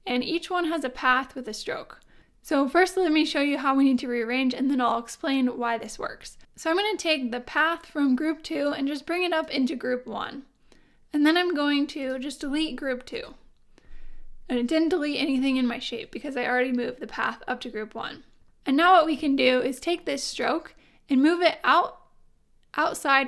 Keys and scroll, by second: 13.1 BackSpace.